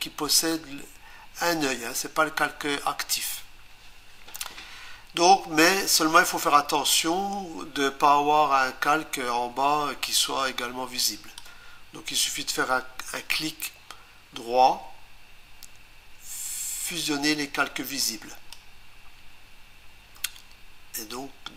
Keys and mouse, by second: 6.4 click, 18.0 click.